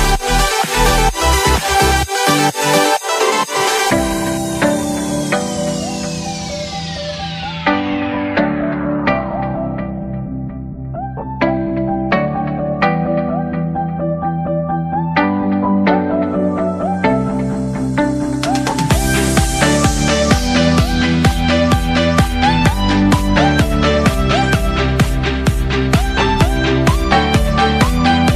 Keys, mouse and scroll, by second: 0.4-4.4 drag, 25.0-25.6 drag, 25.6-27.3 middle drag.